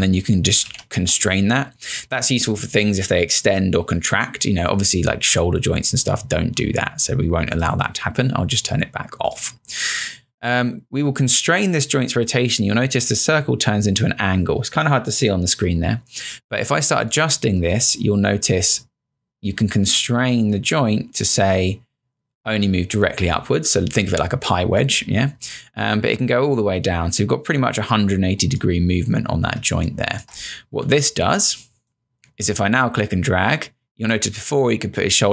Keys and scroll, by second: 0.7 z, 29.7 space.